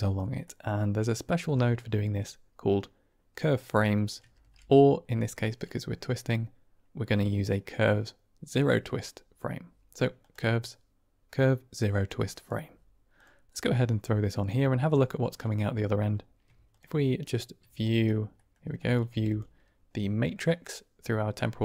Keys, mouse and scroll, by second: 0.5 middle click, 1.6 click, 4.3 shift+a, 14.1-14.5 drag, 14.9 click, 17.7 ctrl+right click, 18.4 middle click, 18.8 click, 19.0 g.